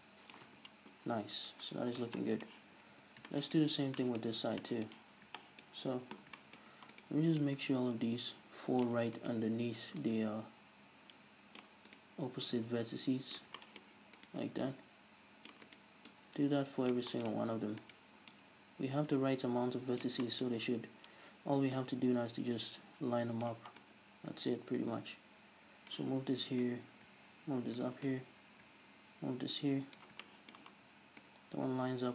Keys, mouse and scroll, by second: 0.5 Tab, 1.4 scroll down 1, 2.2-7.0 shift+middle drag, 3.0 Tab, 3.6-4.0 scroll up 1, 5.2 scroll down 1, 6.6-7.0 scroll up 2, 7.0-7.4 right drag, 7.4-10.0 drag, 10.0 right click, 11.6 click, 11.9 right click, 12.5-13.6 drag, 13.6 shift+middle click, 14.2 right click, 14.7-15.7 drag, 15.7 right click, 16.1-17.1 drag, 17.1 shift+middle click, 17.4-17.8 scroll up 2, 17.8 right click, 18.3-20.2 drag, 20.2-21.8 shift+middle drag, 20.6-21.8 scroll up 2, 21.8 right click, 23.8-25.9 right drag, 26.6 right click, 28.1 right click, 30.3-31.3 shift+middle drag, 31.3-32.1 right drag.